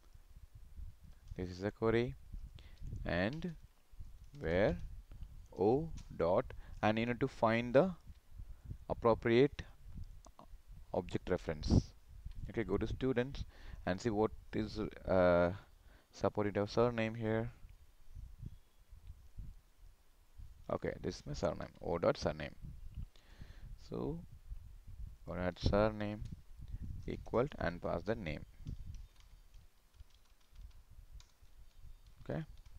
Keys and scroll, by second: 1.9 ctrl+v, 21.5 ctrl+c, 25.7 ctrl+v.